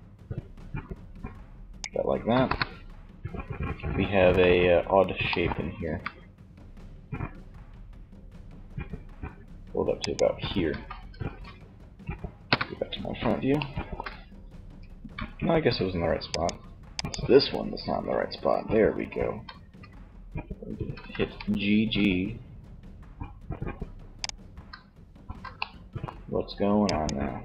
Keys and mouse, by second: 1.6 KP_1, 4.9 g, 9.8 z, 11.4 KP_1, 14.1 g, 15.6-17.3 drag, 17.3-18.8 right drag, 18.8 z, 20.1 z, 20.6 g, 23.4 click, 23.8 ctrl+z, 24.4 z, 26.0-27.4 drag.